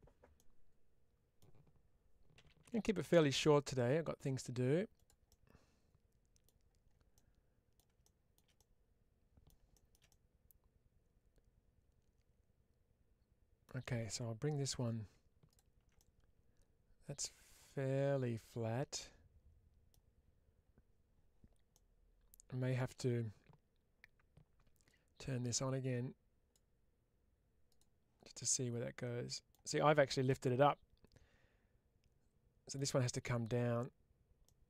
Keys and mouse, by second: 0.3 middle click, 4.8 click, 5.1-6.3 middle drag, 7.0 middle click, 7.9 shift+middle click, 8.4-9.5 middle drag, 9.6 shift+middle click, 10.0-13.5 middle drag, 14.6 2, 15.5 click, 15.8-19.8 middle drag, 21.6-22.6 middle drag, 24.8-26.5 drag, 27.6 click, 28.4-29.4 middle drag, 30.2-32.6 middle drag, 34.3-34.6 middle drag.